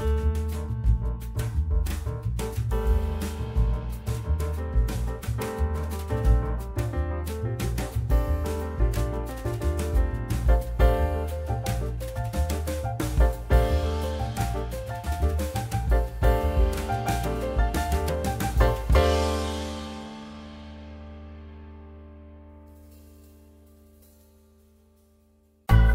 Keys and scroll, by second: 3.5 F3, 5.5 F3, 7.5 F3, 7.8 1, 7.9 F3, 9.8 F4, 14.8 F4.